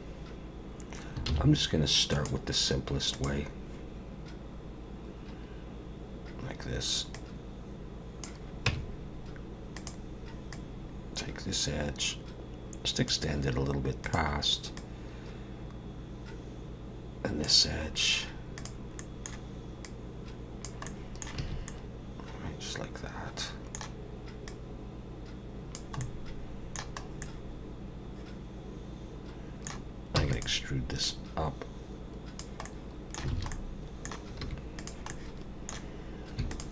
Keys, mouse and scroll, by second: 1.3 shift+a, 7.1 click, 8.7 Tab, 9.8 click, 10.5 click, 14.0 click, 14.8 click, 18.6 click, 19.0 middle click, 19.8 click, 20.9 middle click, 21.4 a, 21.7 middle click, 24.5 click, 26.0 middle click, 27.0 scroll up 1, 27.2 middle click, 30.2 e, 31.0 click, 32.6 middle click, 33.3 alt+a, 33.5 middle click, 34.4 3, 34.8 click, 35.1 middle click, 36.5 shift+click.